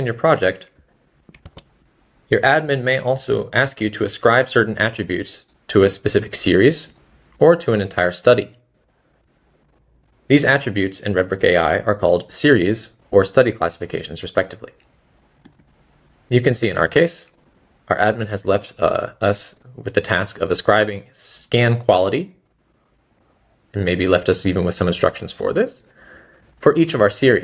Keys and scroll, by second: 1.2-1.9 typing, 26.9 space.